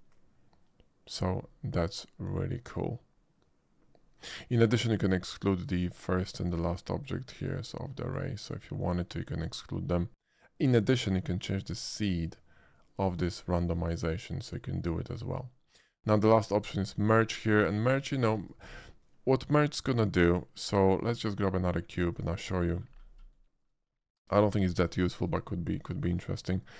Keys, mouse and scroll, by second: 1.5-4.7 middle drag, 5.8 click, 6.1 click, 6.9 click, 7.3 click, 8.0 click, 8.4 click, 11.1-13.1 drag, 13.9-14.9 middle drag, 16.0-18.1 scroll up 1, 18.1 a, 18.3 x, 18.4 click, 19.9 shift+a, 22.1 click, 22.5-22.8 middle drag, 23.1-23.6 shift+middle drag, 24.0 shift+middle drag, 24.4 shift+middle drag, 25.0 shift+middle drag, 25.8-26.1 shift+middle drag.